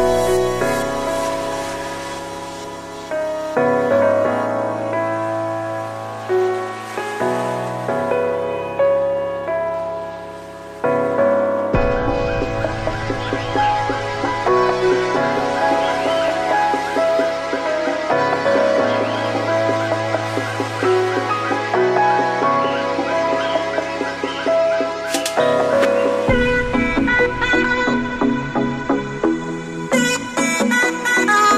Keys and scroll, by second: 29.1 ctrl+t, 31.4 ctrl+t.